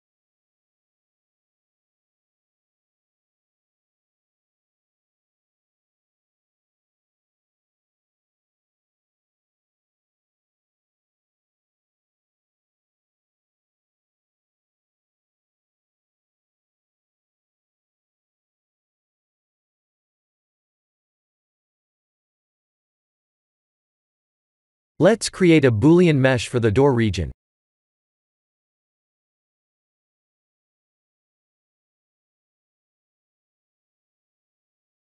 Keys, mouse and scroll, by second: 0.0 KP_1, 0.8 s, 3.5 click, 3.9 b, 5.3 g, 7.3 s, 9.9 ctrl+z, 10.9 ctrl+z, 11.9 s, 13.6 click, 13.8 Tab, 14.2 shift+z, 14.6 click, 14.9 middle click, 15.0 middle click, 15.2 middle click, 15.7 click, 16.0 right click, 16.7 click, 17.0 middle click, 17.3 middle click, 18.4 middle click, 18.4 KP_1, 19.0 KP_3, 19.5 KP_1, 20.0 shift+z, 20.8 click, 25.9 click, 26.3 shift+a, 32.3 ctrl+3, 33.5 s.